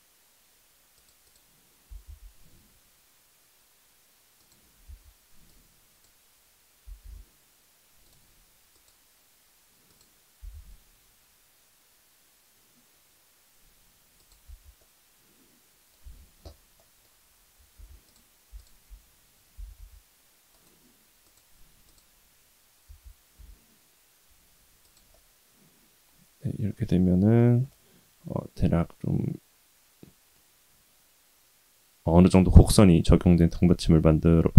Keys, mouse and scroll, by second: 1.9 s, 4.8 Tab, 5.5 click, 6.8 s, 8.7-10.1 drag, 10.4 s, 14.4 Tab, 14.8-15.9 middle drag, 16.0 Tab, 16.7 middle click, 17.7 2, 18.0 click, 18.6 alt+click, 19.5 g, 21.2-22.3 drag, 22.8 g, 25.1-27.4 middle drag, 27.7-32.4 middle drag, 33.6 middle click.